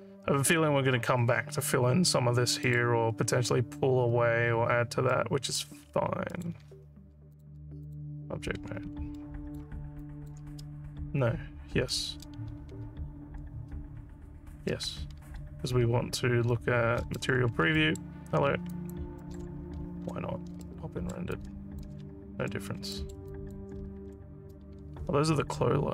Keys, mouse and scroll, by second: 2.7 alt+middle click, 5.1 alt+middle click, 6.3 alt+middle click, 7.4 click, 7.9 click, 9.2 alt+middle click, 10.0 alt+click, 15.4 z, 17.8 alt+middle click, 18.8 alt+click, 19.3 alt+middle click, 19.9 z, 20.7 alt+middle click, 21.4 alt+click, 22.1 z, 23.0 alt+middle click, 23.3 alt+click, 23.9 z.